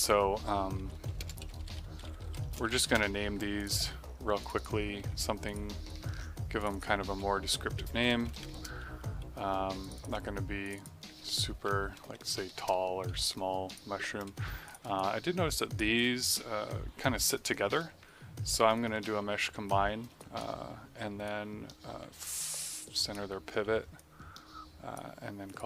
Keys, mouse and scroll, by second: 0.7-3.1 typing, 3.5 click, 4.9 ctrl+c, 5.4 click, 7.0 ctrl+v, 8.2 BackSpace, 8.4 2, 8.5 Return, 9.7 click, 11.2 ctrl+v, 11.9 BackSpace, 12.4 3, 12.5 Return, 13.6 click, 14.8 click, 14.9 alt+click, 15.9 click, 18.0 space, 18.7 click, 18.8 space, 20.2 right click, 21.2 click, 23.6 w, 23.9 click, 25.4 click.